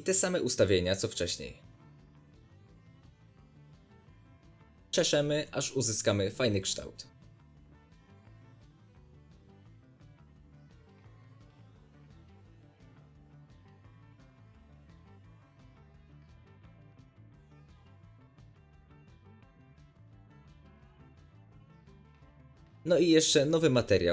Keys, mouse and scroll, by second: 1.1-2.8 drag, 1.2-2.6 scroll down 1, 2.8-3.2 scroll down 1, 3.3 middle click, 3.4 click, 4.2-4.9 middle drag, 4.4-4.9 scroll up 2, 4.9 click, 5.0-5.6 shift+middle drag, 5.6-9.2 drag, 9.2 middle click, 9.6-13.2 drag, 13.2-14.5 drag, 14.3 scroll down 2, 14.5-14.9 shift+middle drag, 14.6 scroll up 2, 14.9-16.6 drag, 16.7 middle click, 16.7 scroll up 4, 17.0-18.0 drag, 18.1-18.6 drag, 18.3-18.6 scroll down 1, 18.6-19.0 shift+middle drag, 18.6-19.2 scroll up 2, 19.0-19.8 drag, 19.7 scroll down 2, 19.8 middle click, 20.4 click, 20.5 scroll up 1, 20.6-22.6 middle drag, 20.8 z, 21.2-22.4 scroll down 2, 22.6 click, 23.1-24.1 drag, 23.6 Return.